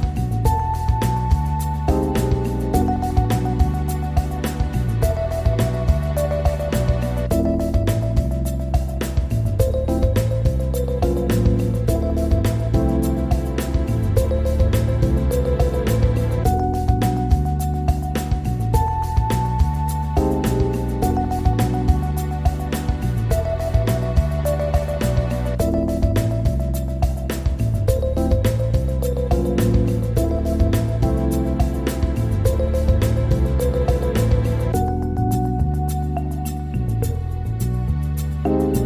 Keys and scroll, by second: 17.3 ctrl+g.